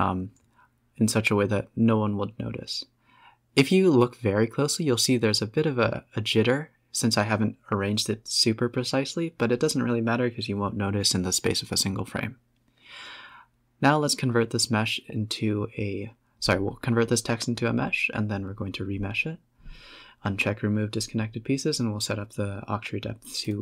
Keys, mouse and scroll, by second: 0.6 click, 1.2-2.1 typing, 3.8-4.5 scroll up 1, 6.1 space, 6.5 click, 7.2-7.9 middle drag, 7.9 Tab, 8.1-8.5 scroll up 5, 8.5 Tab, 9.4 click, 11.5-13.6 drag, 13.6 scroll down 2, 13.9 Tab, 14.3 a, 14.5 e, 15.1 Tab, 15.8-18.7 drag, 19.7 click, 20.4 click, 21.5-23.3 drag, 23.5 middle click.